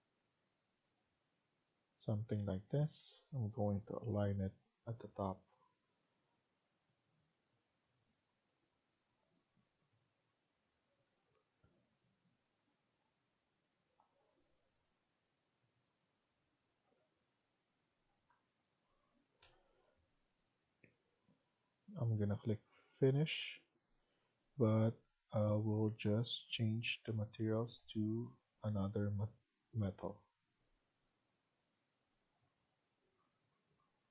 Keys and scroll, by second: 2.7 Escape, 2.9 Escape, 3.5-4.0 typing, 10.6 Escape, 12.3 Escape, 13.0 Escape, 16.7 Escape, 17.0 Escape, 18.0 Tab, 19.4 Delete.